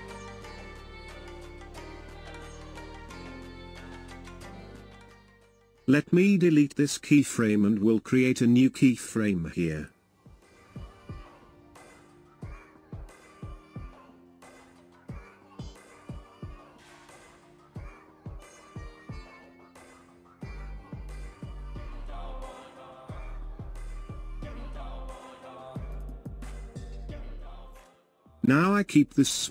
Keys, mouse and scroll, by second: 0.5-8.8 drag, 8.8 Delete, 20.6 click, 24.1-25.3 drag, 24.1-25.3 right drag.